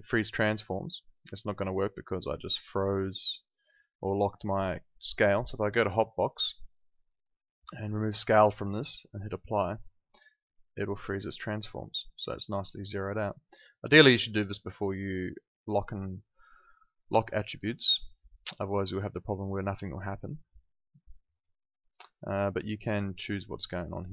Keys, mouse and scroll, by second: 5.8 click, 15.2 click, 21.2 click.